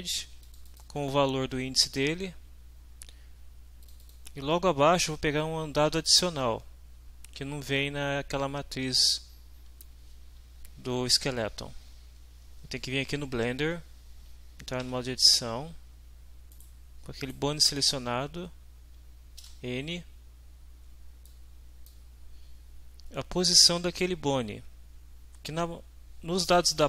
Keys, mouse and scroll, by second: 0.4 click, 3.8 click, 11.9 alt+Tab, 14.8 Tab, 16.5 right click, 17.2 right click, 19.4 n, 21.3-22.1 drag.